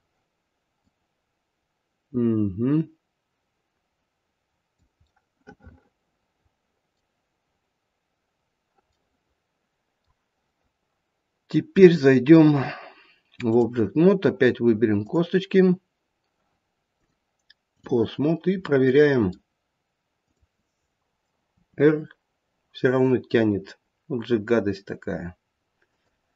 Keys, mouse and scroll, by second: 0.9 click, 0.9-2.4 scroll down 1, 5.1 middle click, 8.3-8.9 scroll down 2, 9.0 middle click, 11.8 click, 13.9-14.8 scroll up 1, 14.8-16.9 scroll up 1, 16.9 click, 18.2-18.7 scroll down 1, 18.7 middle click, 19.2 middle click, 20.2 click, 21.5 r.